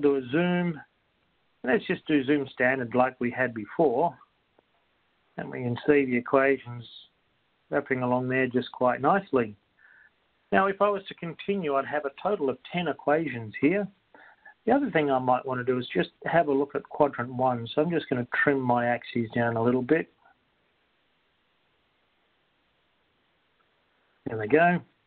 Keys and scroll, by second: 3.7 6, 18.2 0, 19.2 Down, 21.7 0.